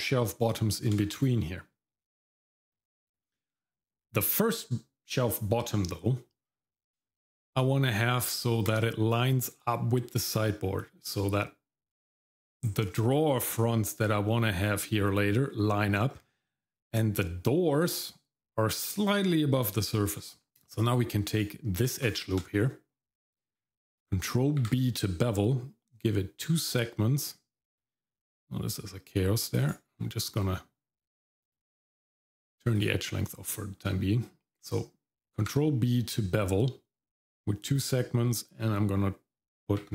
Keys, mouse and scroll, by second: 1.1 shift+z, 2.4 middle click, 2.7-3.2 scroll up 1, 3.2 middle click, 3.5-4.2 scroll up 2, 7.0 shift+middle click, 9.1-10.1 scroll up 2, 10.8 middle click, 11.9 middle click, 12.5-14.7 scroll down 1, 14.7 middle click, 14.7 scroll down 1, 16.1-16.6 scroll up 2, 16.5 middle click, 20.1-20.5 scroll down 1, 20.5 middle click, 20.5-21.0 scroll up 4, 21.3 click, 22.0 alt+click, 22.6-23.6 scroll down 1, 24.6 ctrl+b, 31.4-33.1 drag, 35.4 ctrl+b.